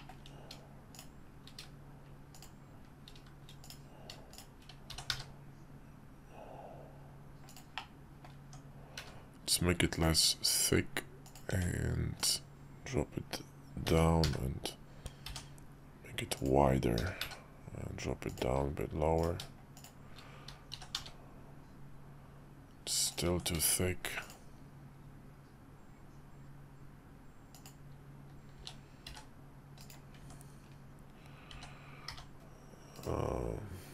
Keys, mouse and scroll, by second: 3.6 click, 4.3 shift+click, 4.9 s, 7.8 middle click, 8.4 Tab, 8.9 q, 11.5 Tab, 12.2-13.8 drag, 13.8 s, 17.0 g, 20.7 s, 23.3 Tab, 23.5 q, 28.6 s, 30.2 Tab, 31.5 s.